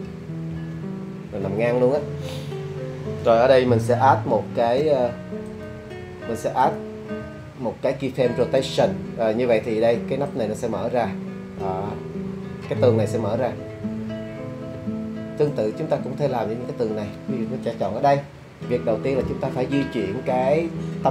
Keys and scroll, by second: 0.1 0, 0.5 Return, 7.2 i.